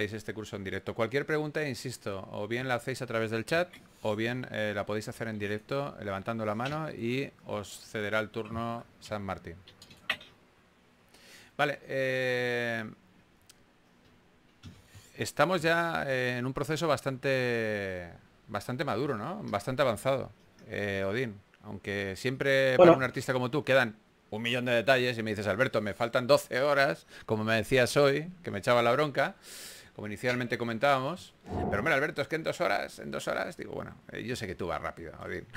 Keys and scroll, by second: 10.0 super+z, 10.6 s, 12.9-13.6 typing, 14.7 shift+s, 20.6-24.7 typing, 27.8 typing, 29.7-30.9 typing.